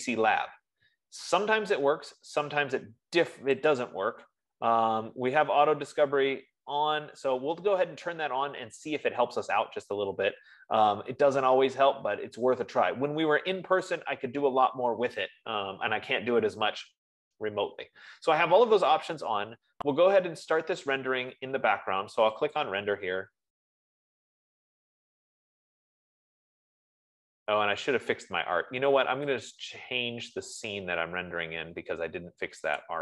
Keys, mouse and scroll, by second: 4.2 click, 20.5 F15, 23.1-25.5 drag, 30.0 click.